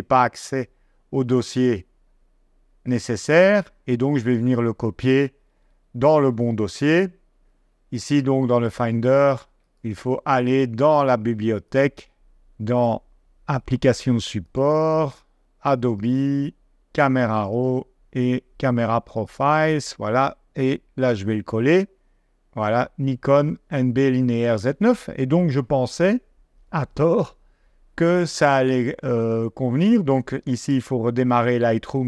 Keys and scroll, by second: 4.1 super+Tab, 7.4 super+c, 25.8 super+Tab, 30.7 super+q.